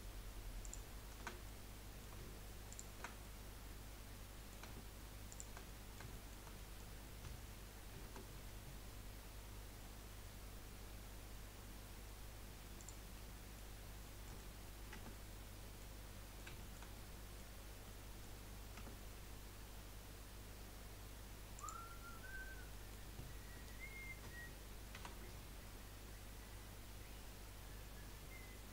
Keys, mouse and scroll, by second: 0.6 alt+shift+click, 1.4-2.7 middle drag, 2.7 alt+shift+click, 3.2-5.3 middle drag, 5.3 shift+click, 5.6-7.9 middle drag, 7.9 ctrl+b, 13.1 scroll up 1, 13.3 middle click, 13.8 scroll down 3, 14.1 middle click, 14.9 Tab, 16.1 middle click, 17.8 middle click, 18.7 Tab, 21.6 click, 22.4 scroll up 1, 22.7-24.9 middle drag, 24.9 ctrl+r.